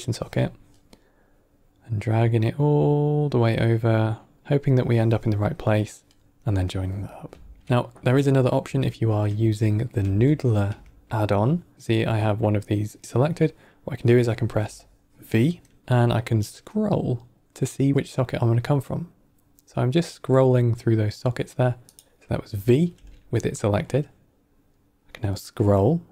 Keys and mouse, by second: 6.6 middle click, 7.5 ctrl+middle click, 8.2 middle click, 8.9 ctrl+right click, 9.5 middle click, 10.2 ctrl+middle click, 10.8 middle click, 12.1 click, 12.9 middle click, 15.7 v, 22.8 v.